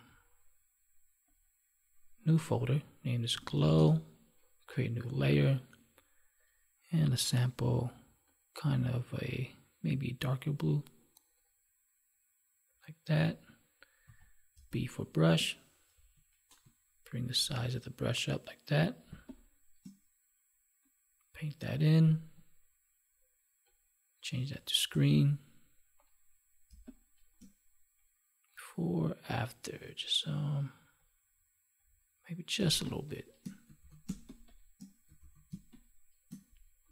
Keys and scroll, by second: 14.5 space, 19.0 space, 26.6 space, 32.5 space, 34.0 space, 35.2 ctrl+s, 35.4 space.